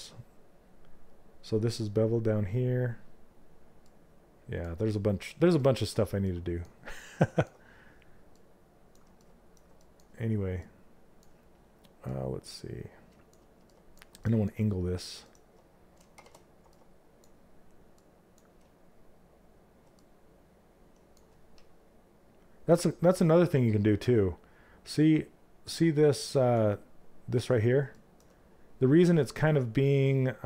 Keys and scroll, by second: 25.0 F11.